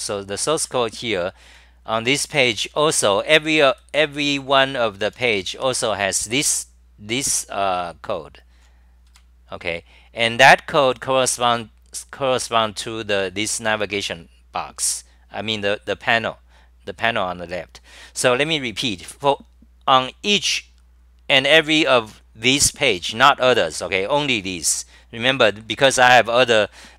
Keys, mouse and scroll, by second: 5.0-5.8 typing.